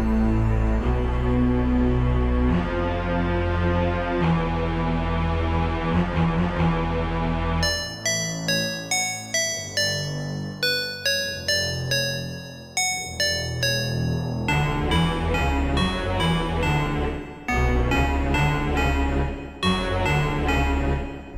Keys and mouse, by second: 3.8-6.9 drag, 11.8-14.8 drag.